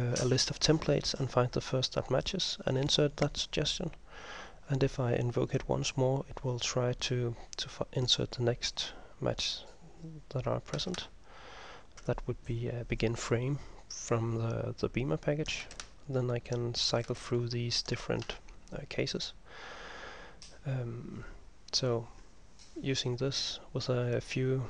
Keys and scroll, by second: 11.1 ctrl+m, 15.9 ctrl+m, 17.3 ctrl+m.